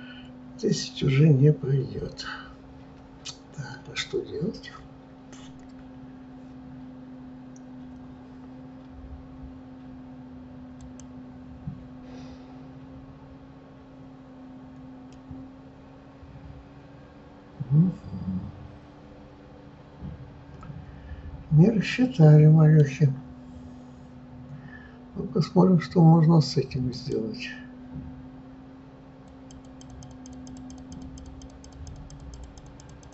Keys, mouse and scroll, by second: 15.2-18.1 middle drag, 27.0-33.1 drag.